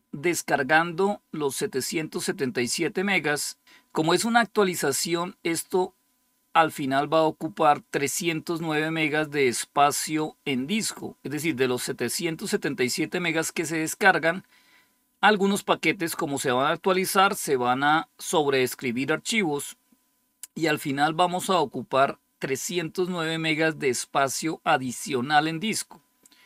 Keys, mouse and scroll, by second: 7.8-11.6 drag.